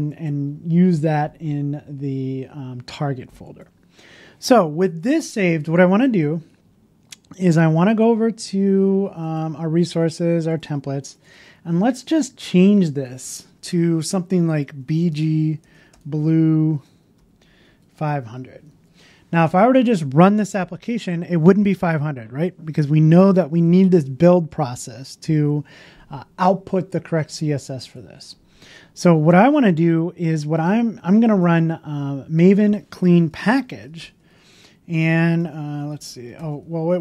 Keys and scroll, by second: 5.1 super+s, 5.1 super+s, 18.8 super+s, 18.8 super+s.